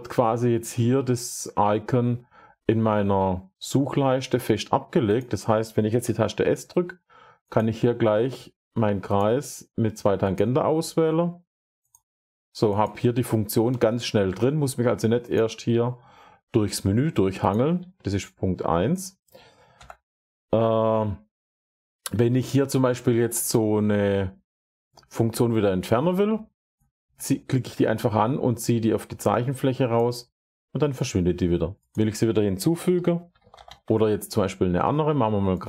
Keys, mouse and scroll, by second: 5.1 drag, 5.9 s, 7.4 click, 9.0 click, 10.2 click, 11.8 click, 12.7 click, 13.5 Escape, 15.2 click, 17.4 click, 17.7 Escape, 18.9 click, 19.7 Delete, 22.1 s, 29.8 click, 31.8 click, 32.6-34.0 typing, 33.2-34.8 drag, 35.5 click.